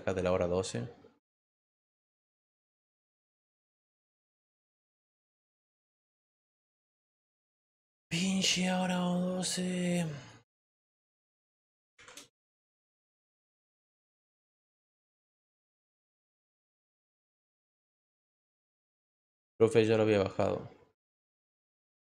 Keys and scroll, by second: 10.4-11.9 typing.